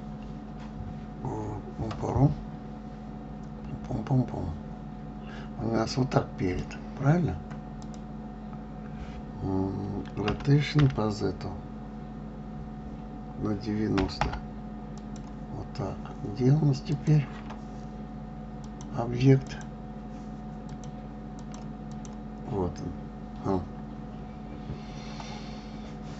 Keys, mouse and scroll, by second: 8.2 click, 10.7 r, 17.3 click, 19.0-21.2 drag, 21.8 click, 22.3 click.